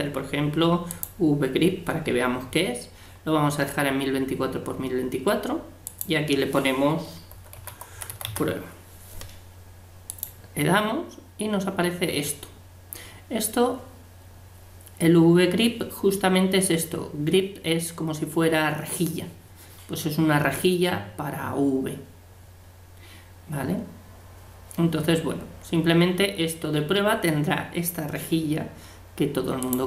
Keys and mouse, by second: 11.1-16.0 middle drag, 22.7-28.6 middle drag, 29.6-29.8 drag.